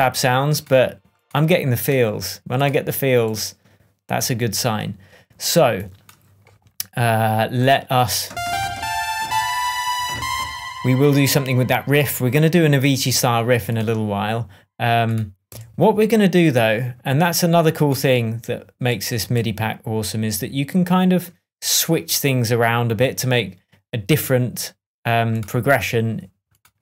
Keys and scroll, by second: 15.5 BackSpace.